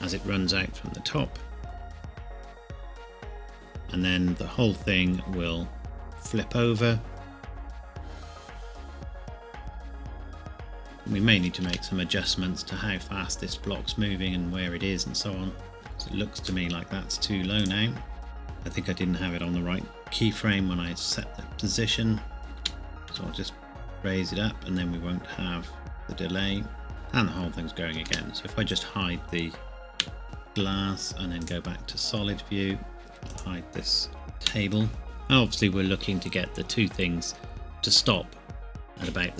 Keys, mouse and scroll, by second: 1.9 scroll up 1, 2.2 scroll down 1, 11.6 space, 15.7 click, 16.9 middle click, 17.6 click, 22.4 click, 22.6 g, 23.1 z, 28.1 space, 28.7 click, 29.9 h, 31.4 click, 33.3 click, 34.4 h.